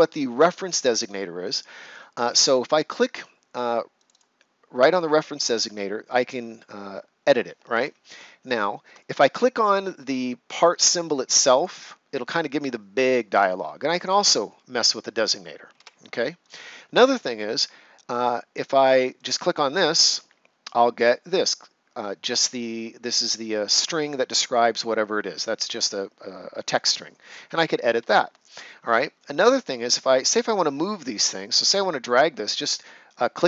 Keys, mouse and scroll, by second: 2.2 click, 7.7 Escape, 8.3 ctrl+scroll up 1, 10.4 click, 14.1 click, 28.0 Escape, 33.2 click.